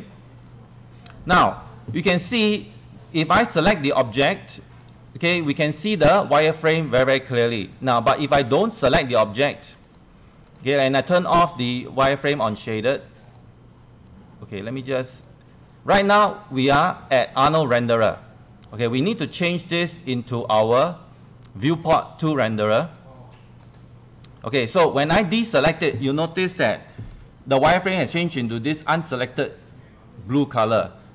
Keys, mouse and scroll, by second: 4.4-14.3 drag, 24.1 click.